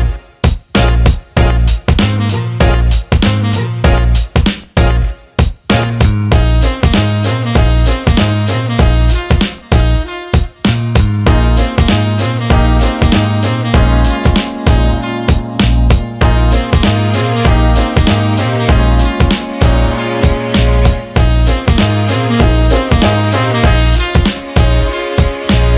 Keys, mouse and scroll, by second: 2.4 s, 5.0 click, 9.6 Tab, 10.6 alt+shift+middle click, 10.9 alt+middle click, 12.6 alt+middle click, 13.5 click, 14.9-16.3 right drag, 17.1 alt+shift+click, 17.5-18.9 alt+drag, 19.4 alt+click, 20.2 Tab, 21.8-22.8 drag, 23.3 click, 24.1 click, 25.1 shift+click, 25.6 alt+middle click.